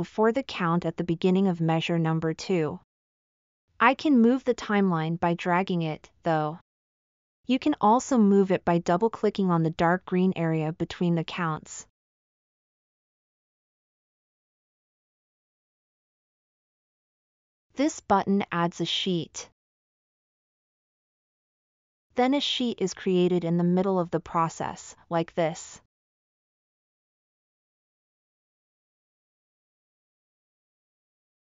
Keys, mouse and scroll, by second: 19.9 click, 27.5-30.1 drag, 31.3 click.